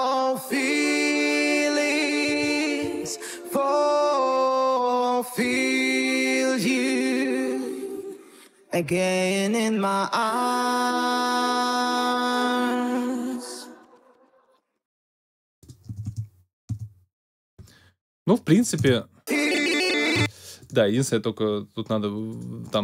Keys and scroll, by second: 15.8 space, 18.7 space, 20.1 space.